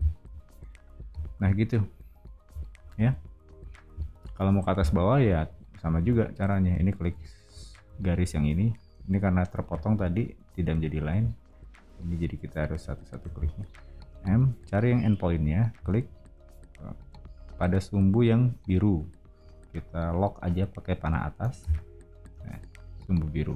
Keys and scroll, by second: 1.1 o, 5.9 space, 14.2 m, 21.5 Up.